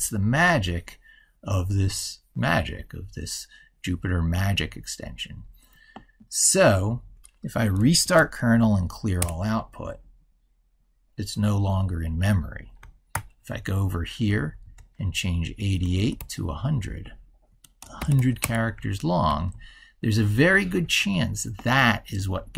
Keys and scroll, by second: 7.8 ctrl+shift+r, 12.9 ctrl+super+Right, 19.0 ctrl+super+Left.